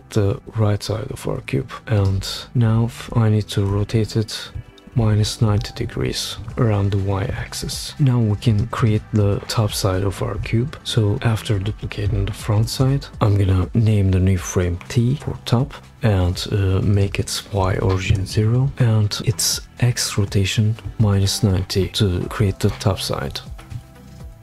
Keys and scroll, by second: 4.6 shift+Page_Down, 4.9 shift+Down, 5.1 shift+Page_Down, 7.3 shift+Down, 10.8 super+d, 12.5 shift+t, 17.6 0, 18.1 Return, 23.3 shift+Page_Down, 23.5 shift+Page_Down, 23.7 shift+Page_Down.